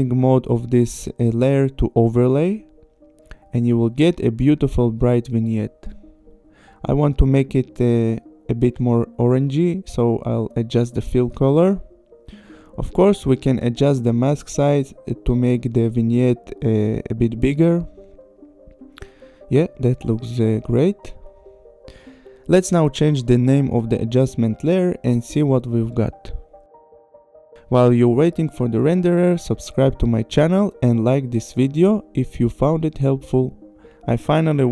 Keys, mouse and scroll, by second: 0.2 click, 1.0 click, 3.1 click, 4.0 click, 6.8 click, 8.7 click, 10.0 click, 12.0 click, 14.7 click, 15.8 click, 18.7 click, 21.8 click, 22.1 Return, 22.5 click, 23.3 click, 23.4 Return, 24.1 ctrl+c, 24.7 click, 24.9 Return, 25.2 ctrl+v, 25.5 Return, 25.7 click, 27.3 click, 28.7 n, 28.9 click, 29.3 click, 30.7 space.